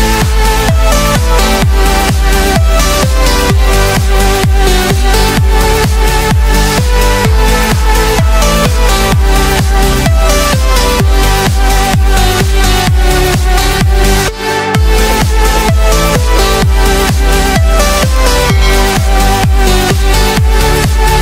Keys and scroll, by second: 10.7 ctrl+space, 19.5 ctrl+shift+a.